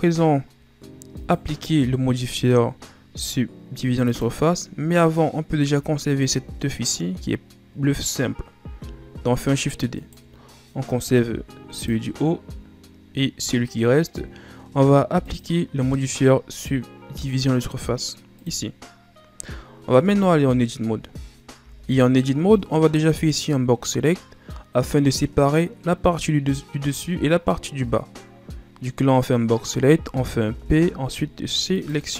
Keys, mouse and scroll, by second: 0.1-1.2 scroll up 3, 1.2 right click, 4.0-7.1 drag, 9.1 shift+d, 11.7 click, 15.2-18.3 drag, 19.9 Tab, 21.3 scroll down 1, 21.3 right click, 21.6 b, 30.5 p.